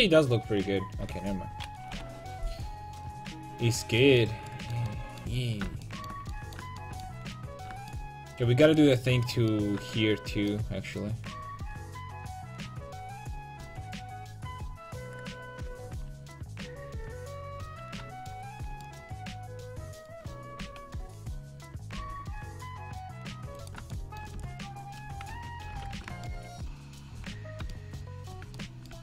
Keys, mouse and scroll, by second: 2.0 KP_5, 3.1-4.3 middle drag, 8.7 right click, 9.0 Tab, 11.9 l, 12.5 l, 16.1 shift+h, 17.7 a, 20.6 a, 21.6 a, 22.0 c, 24.4 c, 25.8 alt+j, 27.2 a.